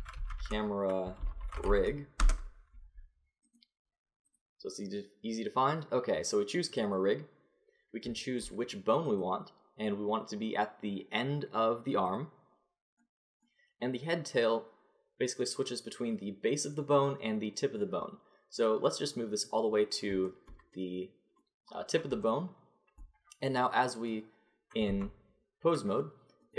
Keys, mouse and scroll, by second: 3.5 right click, 4.3-5.3 middle drag, 5.3-7.7 drag, 9.1-11.0 drag, 11.0-13.0 middle drag, 18.7-20.3 drag, 20.3-21.5 middle drag, 23.9 click, 24.9 Tab.